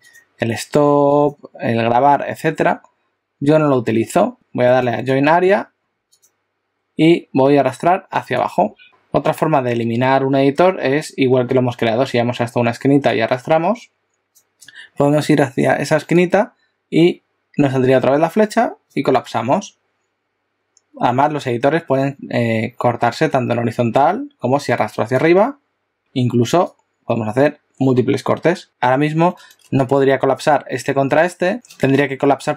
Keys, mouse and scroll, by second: 0.0 click, 4.7 right click, 8.8 click, 13.1 click, 16.5 click, 25.3 click.